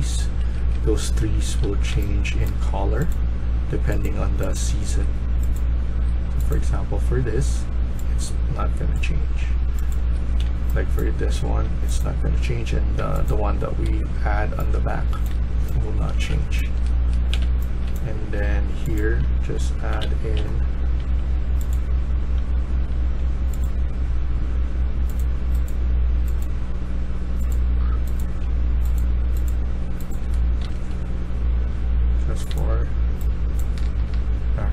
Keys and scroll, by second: 0.3 Escape, 0.6 Escape, 0.9-2.3 typing, 4.8 Escape, 5.8 Escape, 9.8 Escape, 10.3-11.5 a, 12.8 Escape, 13.8 Escape, 14.4-17.8 typing, 18.9-20.8 typing, 22.4 q, 22.8 q, 28.1 a, 29.9-31.0 typing, 32.6 typing, 34.1 typing.